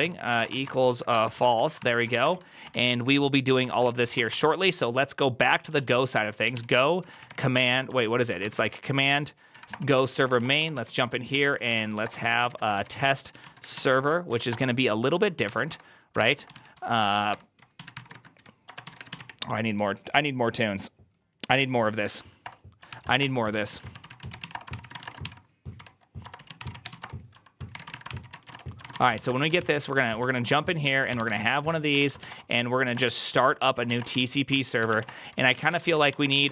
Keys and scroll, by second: 0.0-4.5 typing, 3.5 Return, 3.7 ctrl+c, 5.6 Return, 5.6 ctrl+p, 6.1-19.5 typing, 9.4 Up, 9.6 Return, 9.8 ctrl+c, 22.8 Return, 22.8 ctrl+c, 22.9-36.5 typing, 23.1 Return, 30.3 Return.